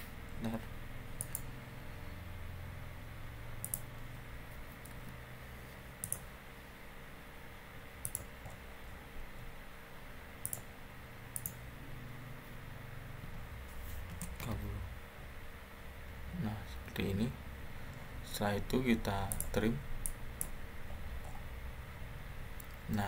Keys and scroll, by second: 4.6 Escape, 13.1-14.0 typing, 14.3 Return.